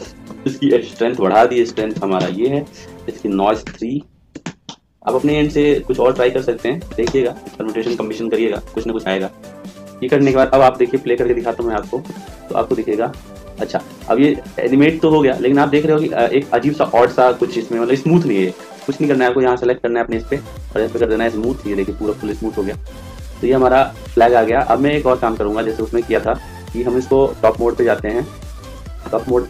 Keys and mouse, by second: 0.8 click, 5.9 click, 11.6 click, 19.5-20.8 right drag, 20.9 click, 25.9 click, 28.5 click.